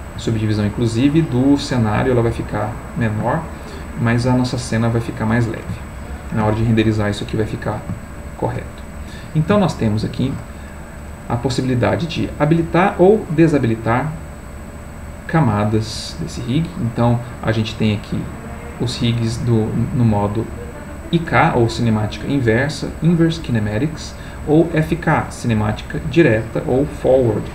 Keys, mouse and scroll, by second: 8.2-10.9 shift+middle drag, 12.6 click, 13.6 click, 15.7 click, 16.8 click.